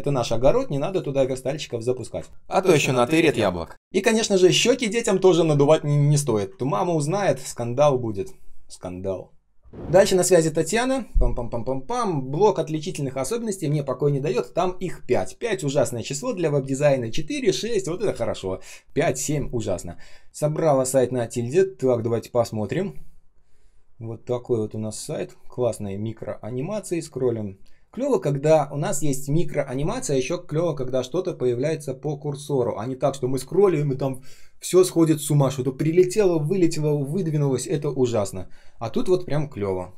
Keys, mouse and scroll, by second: 1.1 space, 1.7 space, 2.1 ctrl+scroll up 1, 2.7 space, 3.2 space, 3.7 ctrl+scroll up 1, 5.3-5.9 ctrl+scroll down 1, 6.6-7.2 ctrl+scroll down 1.